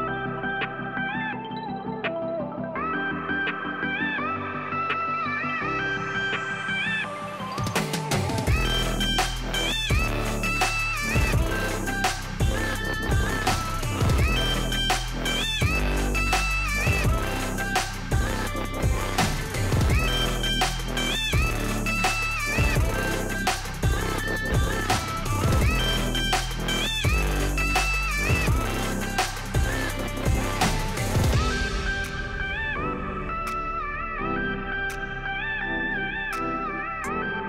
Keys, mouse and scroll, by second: 0.5-1.6 drag, 2.3 click, 2.9 click, 3.2 click, 3.4 click, 3.9-4.4 scroll up 1, 4.7 shift+a, 6.0 s, 6.3 click, 6.5 g, 7.2 click, 7.6 s, 8.4 click, 8.7 g, 9.7 click, 9.9 shift+middle click, 10.5 s, 11.7 click, 11.9 g, 12.8 click, 12.9 scroll up 1, 13.5 Tab, 13.7 click, 14.7 click, 15.9 g, 17.6 click, 18.3 e, 18.5 Escape, 18.9 s, 20.9 click, 21.0 e, 22.0 click, 22.5 e, 23.4 click, 23.6 s, 24.1 click, 25.3 s, 26.2 click, 26.8 shift+middle click, 27.4 e, 29.2 click, 29.5 s, 31.0 click, 31.4 e, 33.1 click, 33.4 e, 34.0 click, 34.5 s, 35.4 click, 35.6 shift+middle click, 36.1 e, 36.9 click, 37.2 e.